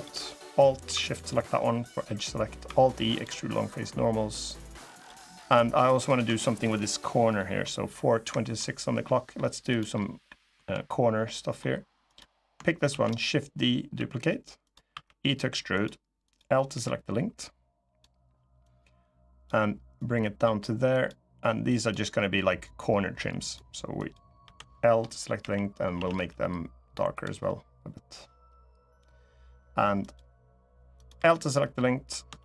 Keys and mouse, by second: 2.4 alt+e, 4.7 click, 5.2 middle click, 5.6 middle click, 6.2 shift+middle click, 7.1 middle click, 8.1 shift+middle click, 8.8 middle click, 9.7 middle click, 11.0 middle click, 11.8 click, 12.6 shift+d, 13.7 s, 14.4 click, 14.6 e, 15.5 click, 16.5 l, 17.1 click, 18.4 click, 19.8 click, 20.7 click, 21.5 click, 22.4 click, 23.7 click, 24.2 l, 25.1 g, 25.7 a, 25.9 g, 26.9 click, 29.8 click, 30.9 l, 31.5 middle click, 32.1 shift+d.